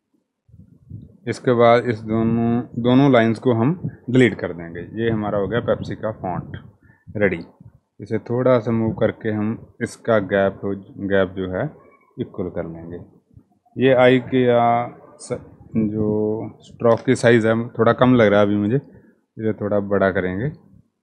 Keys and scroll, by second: 1.7 Delete, 6.2 Right, 6.6 typing, 6.6 Right, 6.8 Right, 8.5 Right, 16.2-17.2 typing.